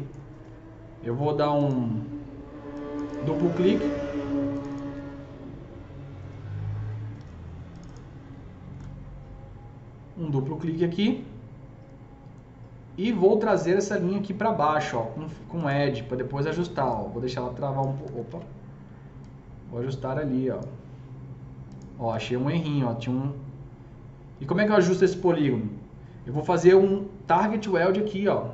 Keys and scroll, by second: 18.2 ctrl+z.